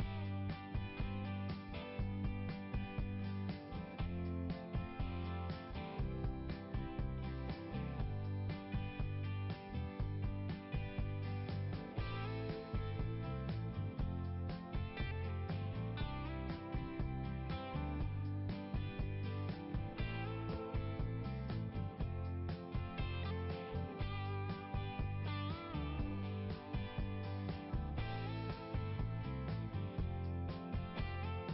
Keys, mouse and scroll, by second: 0.2 click, 1.4 click, 1.9 click, 2.1 click, 2.3 click, 2.5 click, 2.6 click, 2.8 click, 2.9 click, 3.2 click, 3.3 double click, 4.0 click, 4.0 double click, 4.1 click, 4.2 click, 4.3 double click, 5.4 double click, 5.5-8.2 typing, 10.4 click, 10.5 click, 12.1 click, 14.8 click, 18.5 click, 20.0 click, 21.0 click, 22.0 click, 25.1 click, 26.1 click, 27.1 click, 27.9 click, 28.3 click, 30.5 click, 30.7 click.